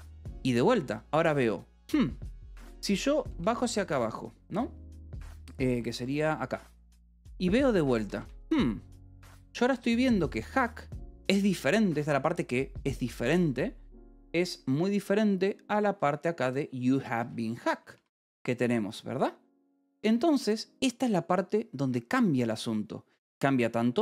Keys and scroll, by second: 2.7 F2, 3.0 7, 3.2 j, 5.6 9, 5.9 j, 7.7-10.8 typing, 11.2 Escape, 15.3 9, 15.9 j, 17.1 v, 18.3 space, 19.9 Escape, 23.8 h.